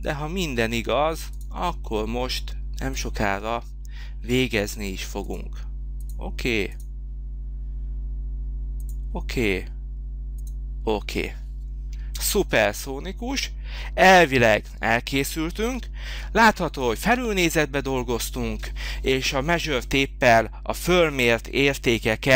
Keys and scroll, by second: 11.9 space, 15.6 h.